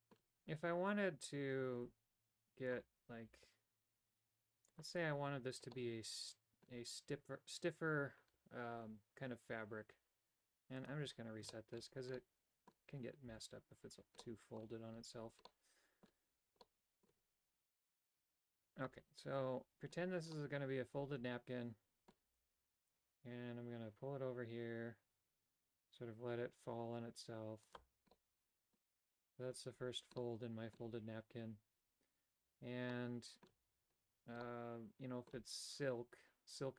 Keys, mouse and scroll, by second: 3.5 g, 6.0 middle click, 10.8 click, 11.6-12.3 typing, 11.7 shift+middle click, 12.3 middle click, 13.5 a, 14.3 middle click, 15.7 middle click, 16.7 middle click, 20.5-22.2 middle drag, 22.5 g, 28.3 middle click, 30.3 middle click, 33.0 middle click, 34.6 middle click.